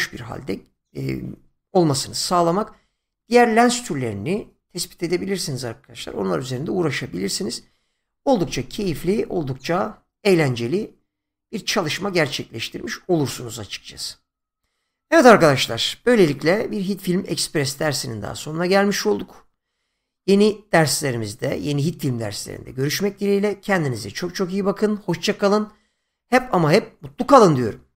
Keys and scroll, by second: 8.8 space.